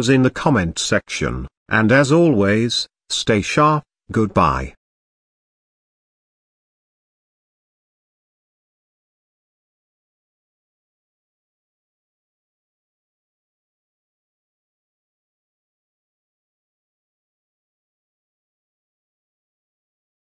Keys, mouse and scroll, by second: 2.1-2.4 scroll down 1, 2.4 Tab, 2.8-4.8 middle drag, 4.8 scroll up 2, 6.2-7.0 scroll down 2, 7.0 click, 7.9 click, 10.4 click, 10.8-11.7 scroll down 1, 11.7 click, 12.3 click, 12.8-14.9 middle drag, 14.9-17.4 drag, 17.9 click, 18.5-20.3 middle drag.